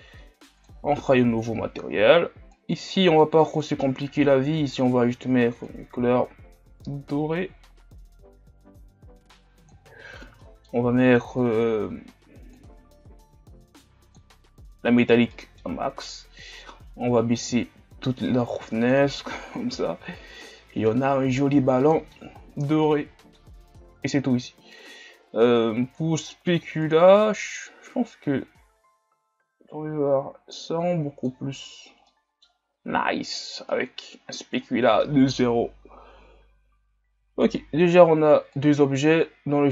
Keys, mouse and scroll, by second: 12.6-19.4 drag, 19.4-20.0 middle drag, 20.0-20.5 scroll up 2, 20.5-21.3 middle drag, 21.3-22.3 scroll down 3, 22.3-22.8 scroll up 5, 22.8-26.9 middle drag, 26.9-29.9 drag, 32.1-32.7 middle drag, 32.7 a, 33.7-38.6 middle drag, 38.6 click, 39.3-39.7 scroll down 5.